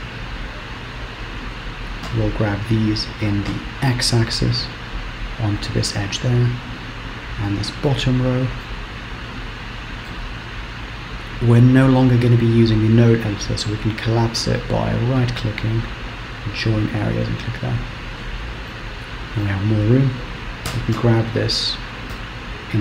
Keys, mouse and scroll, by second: 0.7 click, 2.3 g, 6.0-6.6 scroll down 1, 6.6 click, 8.1 shift+middle click, 9.0-9.6 scroll up 2, 15.1 right click, 17.7-18.2 scroll down 2, 18.2-18.5 scroll up 1, 18.8 shift+middle click, 21.0 g.